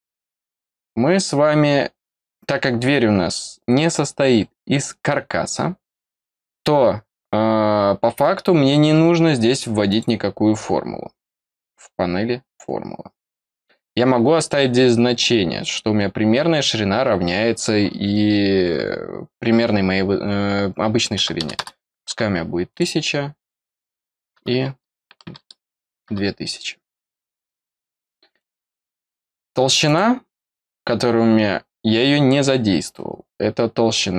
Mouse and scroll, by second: 9.8 click, 14.3 click, 22.6 click, 28.3 click, 29.8 click.